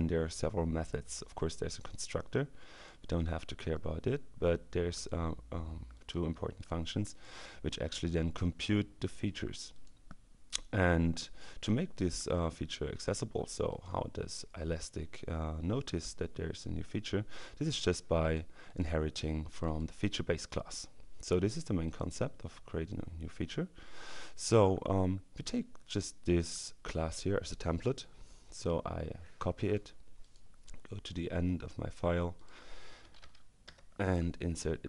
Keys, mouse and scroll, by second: 2.8 click, 4.9 click, 6.0 click, 7.1 click, 9.8 click, 18.3 click, 19.3 click, 21.9 click, 28.5 right click, 29.6 click, 30.7-32.3 scroll down 2, 32.4 click, 32.7 Return, 33.7 BackSpace.